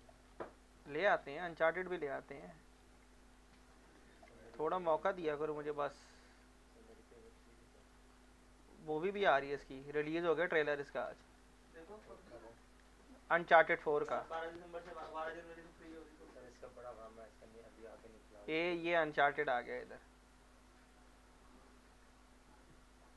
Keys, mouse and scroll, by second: 0.2 scroll up 1, 0.9 scroll down 1, 1.4 scroll down 1, 1.9 click, 2.7 scroll down 1, 3.4 shift+click, 4.4 alt+middle click, 4.9-5.2 scroll up 2, 5.2-5.7 scroll down 2, 6.2 click, 7.2 click, 8.2-9.8 drag, 9.8 shift+click, 10.9 scroll down 1, 11.3 alt+middle click, 11.7 alt+scroll up 1, 11.9 scroll down 1, 12.6 middle click, 13.3 scroll up 1, 14.5 shift+click, 18.6-21.9 drag.